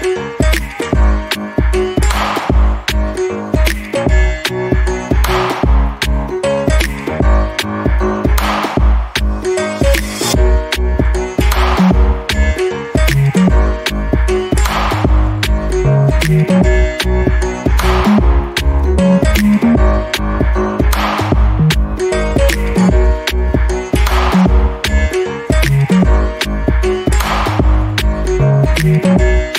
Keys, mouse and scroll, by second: 0.4 alt+click, 1.4 n, 2.0-2.4 scroll down 1, 2.7 alt+click, 6.2 double click, 7.0 alt+click, 7.3 alt+middle click, 7.7 alt+click, 9.6-10.1 scroll up 1, 10.3 alt+click, 15.3 alt+click, 16.3 alt+middle click, 16.8 alt+click, 17.2 alt+middle click, 17.7 alt+click, 18.2 scroll up 1, 18.5 alt+middle click, 18.8-19.1 alt+scroll up 1, 19.1 alt+click, 22.2 ctrl+z, 23.1 ctrl+click, 24.5 scroll down 1, 25.2 alt+middle click, 25.8 alt+click, 26.2 alt+middle click, 26.5 alt+click, 26.8-27.5 scroll up 1, 27.6 alt+click, 28.2-28.9 alt+scroll up 2, 29.0 ctrl+click.